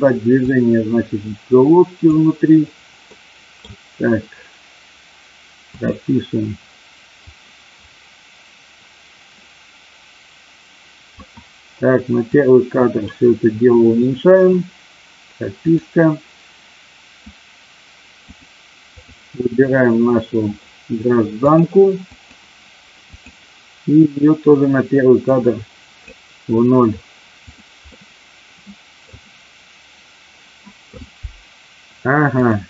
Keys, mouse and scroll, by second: 0.3-2.0 drag, 3.0 middle click, 7.4-11.3 drag, 12.4 click, 15.6 click, 18.4 click, 21.5 click, 23.0 click, 25.1-27.5 drag, 27.8-29.0 middle drag, 32.2 click.